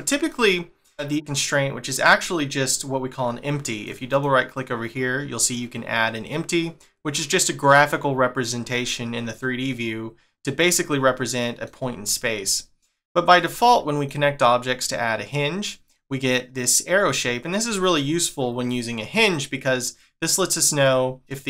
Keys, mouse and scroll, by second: 3.8 right click, 4.1 right click, 11.3 middle click, 12.1 middle click, 13.7 shift+middle click, 18.0 middle click, 21.1 middle click, 21.2 middle click.